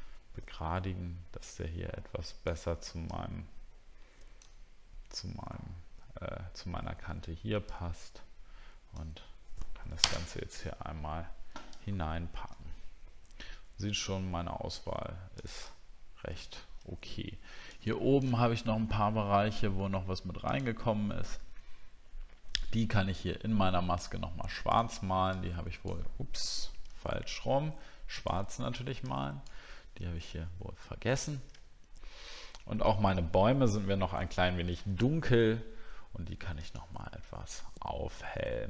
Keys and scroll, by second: 11.9 alt+scroll up 1, 13.5-13.9 alt+scroll down 1, 14.0 alt+scroll up 1, 15.7 alt+scroll down 1, 16.3 alt+scroll down 1, 26.9 ctrl+z, 31.5 alt+scroll down 1, 32.2 alt+scroll down 1.